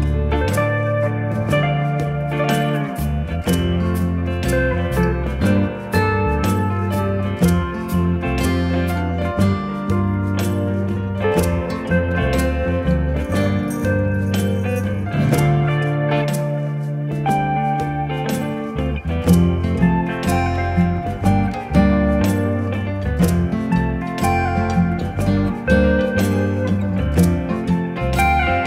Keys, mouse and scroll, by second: 1.7 click, 3.9 click, 6.2 click, 8.8 click, 10.8 click, 22.3 click, 24.5 click, 26.2 click, 27.8 Left.